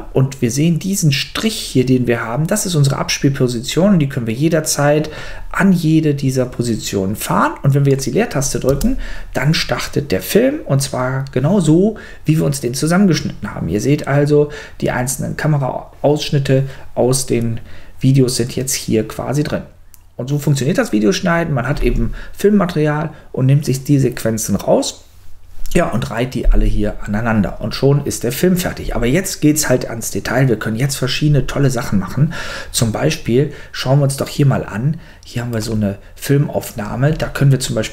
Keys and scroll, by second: 8.7 space.